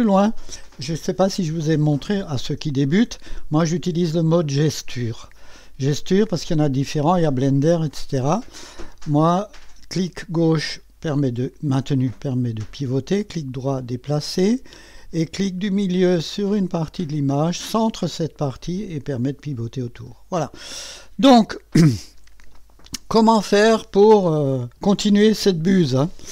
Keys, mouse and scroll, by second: 0.4 click, 1.3 click, 2.2 click, 5.0-6.0 drag, 9.0-10.9 drag, 11.5-14.1 drag, 13.3-15.4 right drag, 16.9 middle click, 17.7-20.6 drag, 21.1 click, 22.5-24.0 drag.